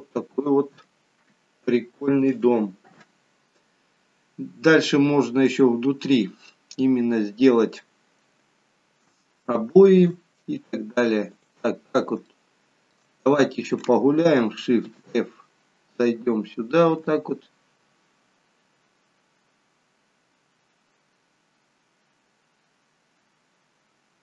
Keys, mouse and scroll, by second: 2.3 click, 5.6-6.1 scroll up 6, 6.1-6.6 scroll down 2, 6.6 middle click, 6.6-7.0 scroll down 1, 9.1 shift+middle click, 11.4 click, 12.3 shift+middle click, 14.9 shift+f.